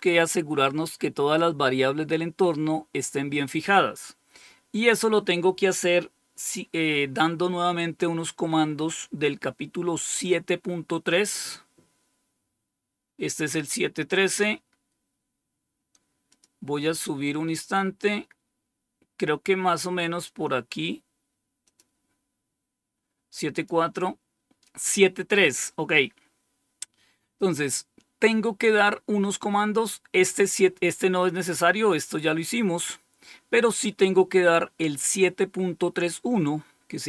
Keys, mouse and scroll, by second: 16.2 click, 21.6 click, 23.4 click, 32.1-32.8 scroll down 3, 32.8 scroll up 2, 33.6-34.3 scroll up 2, 34.3-36.2 scroll up 1, 36.2-37.0 scroll down 2.